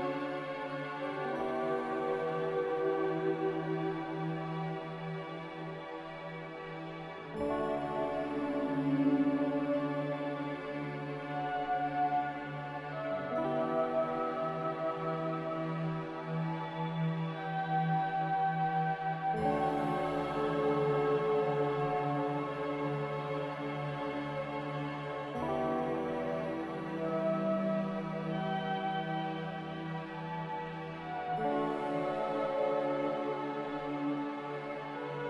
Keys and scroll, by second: 6.2 Escape, 30.6 a.